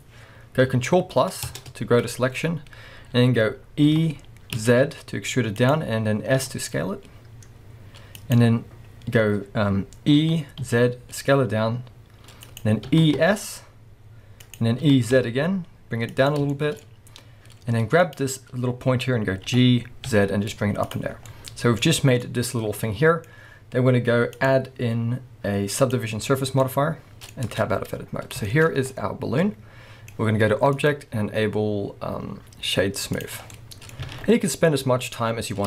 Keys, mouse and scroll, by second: 1.5 ctrl+KP_Add, 2.5 scroll up 1, 3.9 e, 5.7 click, 6.4 s, 8.3 click, 10.2 e, 12.6 click, 12.9 e, 14.6 click, 14.8 e, 16.3 click, 16.5-18.0 shift+middle drag, 16.8-18.0 scroll up 2, 18.0 click, 19.4 g, 21.0 click, 21.1 scroll down 1, 21.2 scroll up 1, 21.3-24.4 middle drag, 21.8 scroll up 1, 24.4-26.6 drag, 26.4 scroll down 1, 26.6-30.8 middle drag, 27.5 Tab, 27.7-28.5 scroll down 1, 28.8 scroll up 1, 30.8-33.5 drag, 33.4 scroll down 1, 33.5-35.6 middle drag, 34.1 alt+a, 34.3-34.7 scroll up 1, 35.1-35.6 scroll up 1.